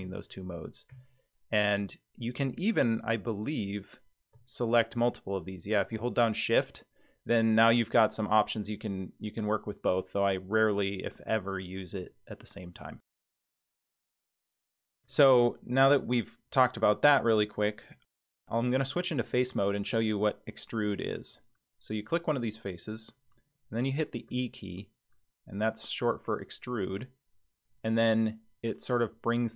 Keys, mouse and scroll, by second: 0.0-1.7 typing, 3.5 click, 4.6 shift+click, 13.0 click, 14.4 Tab, 14.9 Tab, 16.0 middle click, 18.5 click, 19.2 middle click, 20.8-21.6 scroll down 1, 22.0 click, 24.3 e.